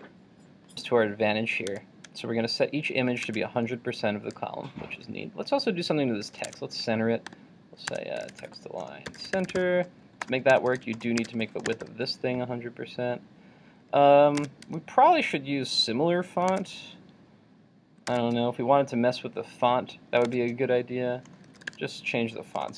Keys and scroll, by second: 1.7 super+Tab, 6.7 super+Tab, 14.4 super+Tab.